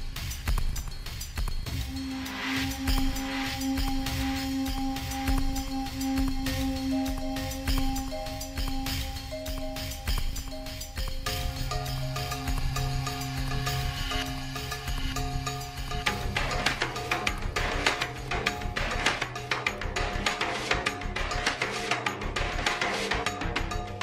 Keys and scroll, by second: 4.2 ctrl+a, 7.1 ctrl+a, 10.1 ctrl+t, 12.6 alt+shift+Return, 14.1 ctrl+shift+t, 15.9 alt+shift+Return, 19.4 space, 23.0 b.